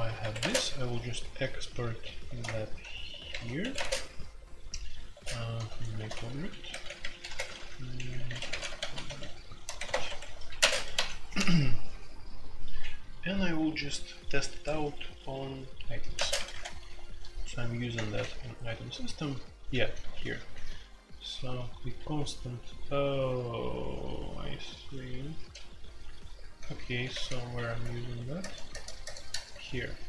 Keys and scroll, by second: 0.0-30.0 typing, 0.2 Escape, 0.4 Tab, 2.4 Return, 9.0 Escape, 27.8 alt+n, 28.4 alt+n, 28.7 alt+n, 29.0 alt+n.